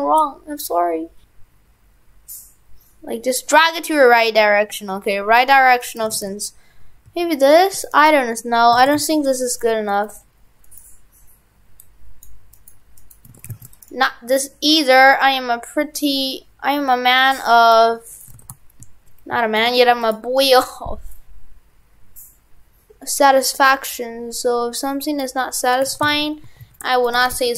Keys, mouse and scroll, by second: 5.8 right click, 6.1 shift+f, 7.9 right click, 8.8 shift+f, 9.9 right click, 11.8 click, 12.5 right click, 12.7 right click, 13.0 right click, 13.1 right click, 13.3 shift+f, 13.9 right click, 14.7 click, 18.1 right click, 18.3 shift+f, 20.4 right click, 21.1 click, 25.7 right click, 25.8 right click, 25.9 shift+f, 27.3 shift+f.